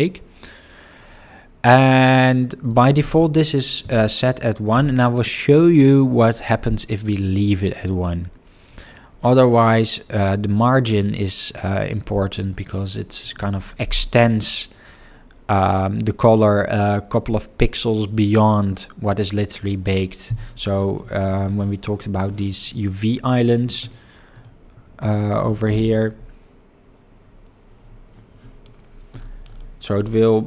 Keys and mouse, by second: 2.6-4.8 drag, 24.3 click, 28.1 Tab.